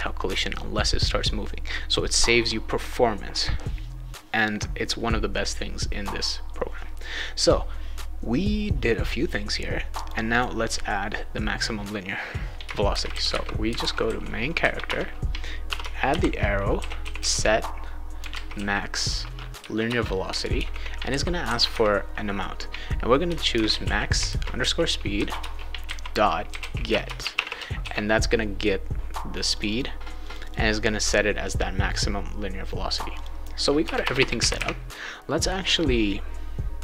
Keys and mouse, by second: 9.9 click, 10.3 click, 12.6-14.5 typing, 14.8 Return, 15.7-19.0 typing, 19.8 Return, 20.1-21.1 typing, 23.3-27.8 typing, 25.4 Return, 29.5 click, 29.7 click, 30.2 click, 30.4 click, 33.1 click, 33.8 Return, 34.0 Return, 34.1 Return.